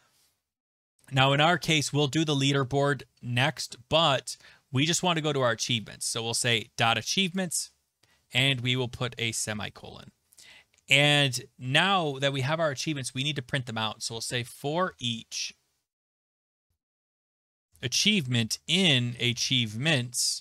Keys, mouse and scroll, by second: 1.5-3.8 scroll, 6.5 click, 6.6 click, 7.3 click, 7.7 click, 8.5 click, 9.4 Return, 13.9-20.4 typing, 20.1 Tab.